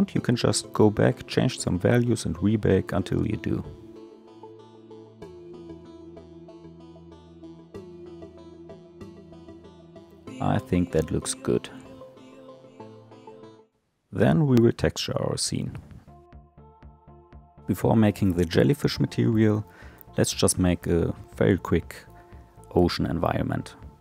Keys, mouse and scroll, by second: 0.2-0.7 middle drag, 0.7 space, 1.6 click, 15.7 click.